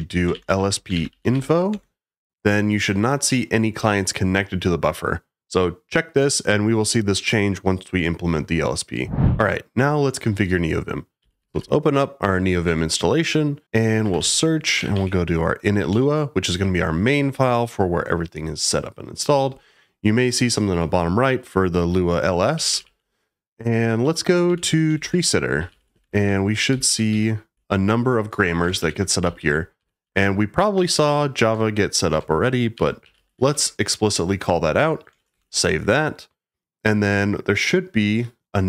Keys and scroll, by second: 0.0-1.8 typing, 10.9-12.0 typing, 12.6 Return, 13.9-15.4 typing, 15.9 Return, 22.5 j, 22.7 j, 22.8 j, 24.0-28.0 typing, 35.2-35.9 typing.